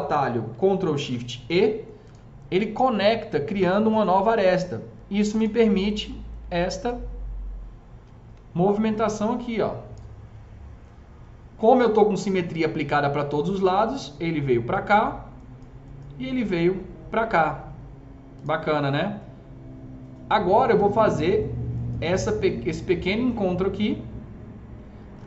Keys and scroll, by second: 0.9 ctrl+shift+e, 8.4 s.